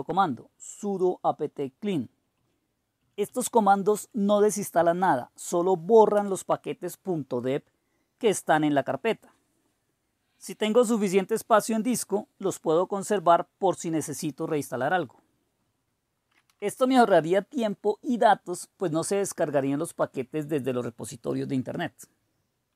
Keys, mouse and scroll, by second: 0.0-2.9 typing, 3.0 Up, 3.2 Up, 3.5 Up, 4.3 Up.